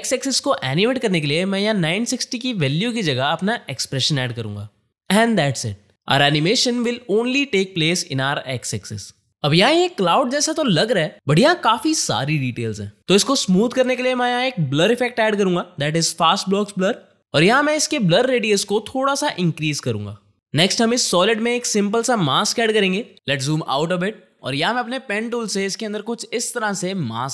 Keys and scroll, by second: 3.2-4.5 typing, 14.2 ctrl+space.